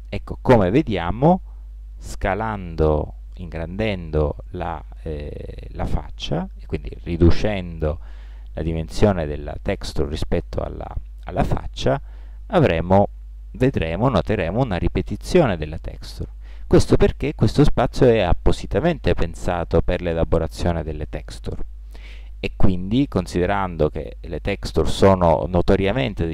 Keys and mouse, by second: 1.5-10.5 middle drag, 12.9 middle click.